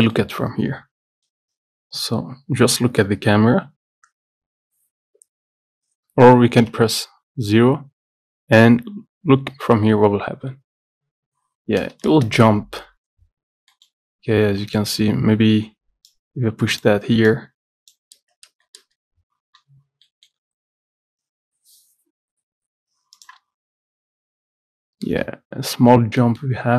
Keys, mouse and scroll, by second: 0.2 middle click, 0.5-3.3 scroll up 2, 6.7 KP_0, 13.5-13.8 scroll up 1, 13.8 middle click, 14.1-16.2 scroll up 19, 14.7 middle click, 16.2 scroll up 1, 16.2-18.6 drag, 18.6 space, 19.1-19.9 scroll down 24, 20.2 middle click, 20.5 scroll up 4, 22.1 scroll up 1, 25.3-25.7 scroll up 10, 26.3 middle click, 26.5-26.7 scroll up 10.